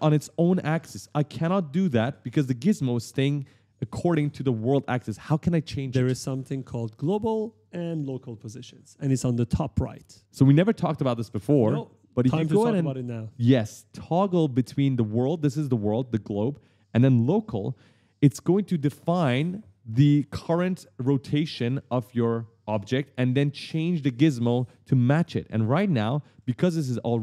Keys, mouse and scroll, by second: 1.1 click, 2.5 right click, 6.4 right click, 6.4-8.9 typing, 16.3 click, 25.0 right click.